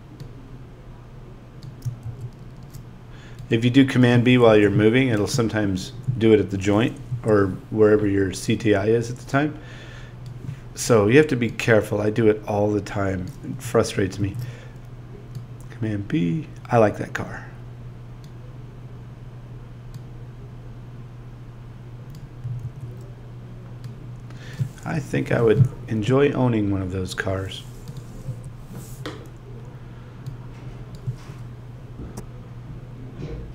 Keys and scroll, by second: 4.4 BackSpace, 7.1 Down, 24.9 BackSpace, 28.3 Down.